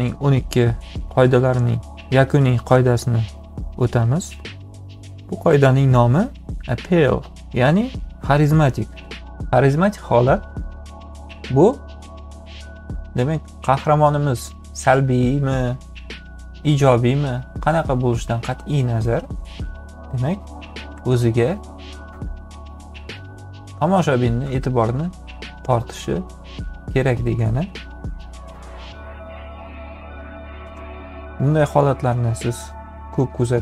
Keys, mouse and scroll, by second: 20.8 ,, 29.1 m, 30.6 v.